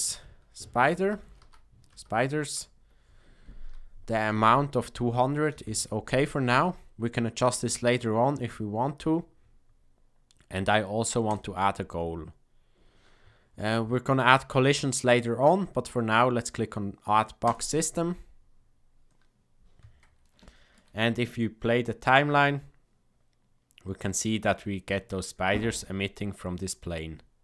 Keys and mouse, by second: 11.2 click, 20.4 shift+middle click, 22.1 click.